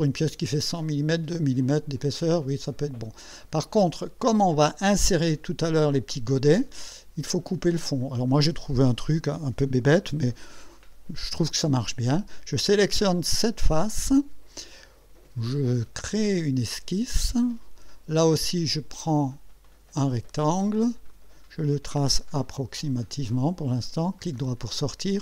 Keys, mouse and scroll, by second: 0.7-2.0 drag, 2.2-4.2 drag, 6.8 click, 8.2-8.7 drag, 13.3 click, 16.4 click, 17.9 scroll up 1, 19.6 click, 21.1 click, 23.0 click, 24.2 right click.